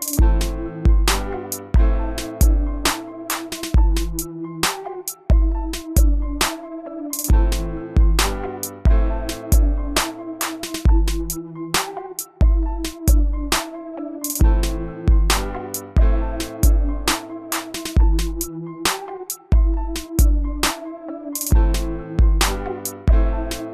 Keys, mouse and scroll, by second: 3.2 click, 4.0-4.3 scroll down 1, 5.5 click, 8.7 1, 9.4 Return, 11.7 click, 13.1-14.8 middle drag, 15.6-20.9 drag, 21.4 2, 22.0 Return, 23.5 click.